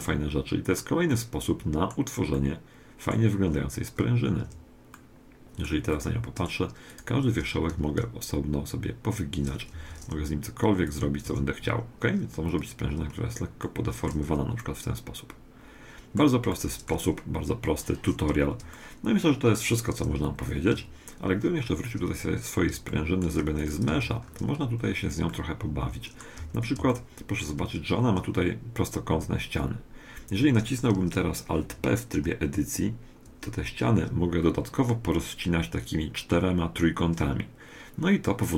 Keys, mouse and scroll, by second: 0.1-3.9 middle drag, 4.4 Tab, 6.1 middle click, 6.9-8.7 right drag, 7.7 r, 10.9-12.8 right drag, 11.3 g, 13.0 middle click, 13.1-13.7 scroll up 1, 13.7 middle click, 14.1 Tab, 18.5 middle click, 20.3 middle click, 20.7 2, 21.6-23.6 middle drag, 23.6-25.3 right drag, 23.9 Tab, 25.3-29.7 middle drag, 26.4 a, 28.7-29.5 scroll down 1, 29.5 scroll down 1, 33.3 alt+p, 37.5-38.5 middle drag.